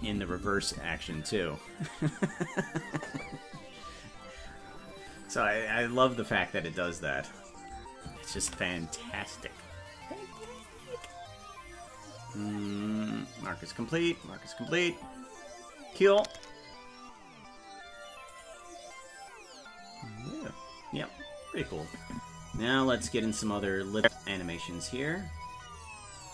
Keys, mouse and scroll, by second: 8.7 ctrl+s, 21.9-23.2 drag, 24.0 click, 26.1 click.